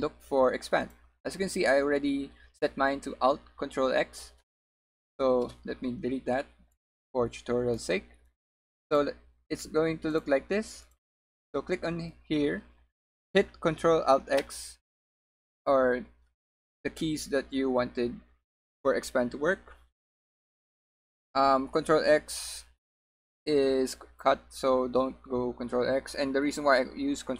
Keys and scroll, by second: 5.5 BackSpace.